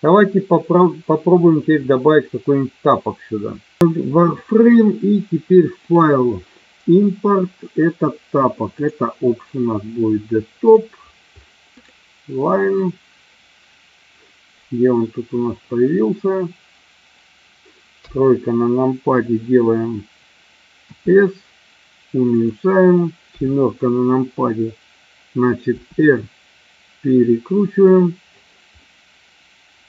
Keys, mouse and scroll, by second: 3.8 n, 5.7-9.1 drag, 18.0 KP_3, 21.0 s, 22.3 click, 23.2 KP_7, 25.6 r, 28.7-29.8 middle drag.